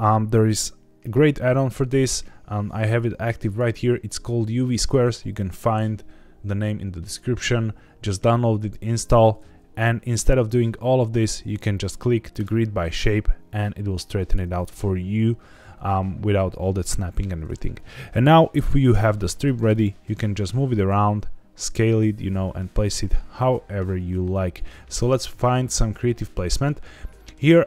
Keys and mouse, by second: 1.8 n, 9.4 ctrl+z, 14.3 shift+middle click, 18.9 g, 19.7 click, 20.9 s, 22.9 Escape, 23.4 s, 24.9 click, 25.4 shift+middle click, 25.9 middle click, 27.1 shift+middle click.